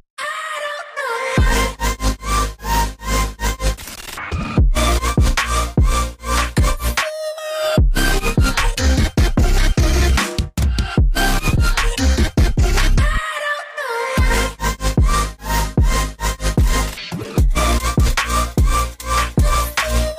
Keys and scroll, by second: 4.5 v, 6.8 ctrl+alt+2, 13.3 ctrl+z, 16.2 ctrl+2, 17.8 g.